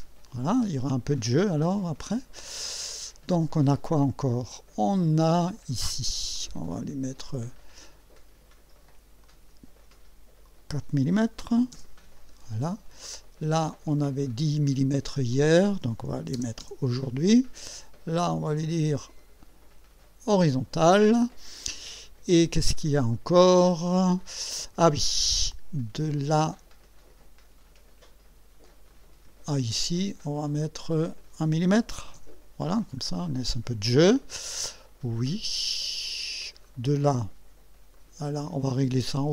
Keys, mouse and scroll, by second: 1.5 scroll up 2, 2.6 scroll down 2, 6.3 click, 9.2 click, 10.4 click, 11.4 4, 11.7 Return, 14.0 click, 15.3 click, 15.9-16.9 typing, 18.6 click, 20.4 click, 22.8 scroll down 2, 26.1 click, 28.9 click, 31.1 click, 31.8 1, 32.2 Return, 33.0 scroll up 1, 36.6 click, 37.9 click.